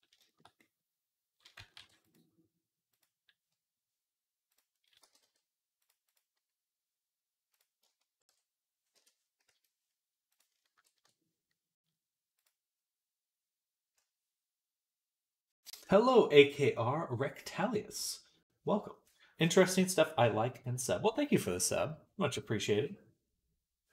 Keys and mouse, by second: 1.6 ctrl+r, 4.9 g, 7.5-12.3 ctrl+drag, 9.3 a, 12.3-23.9 middle drag.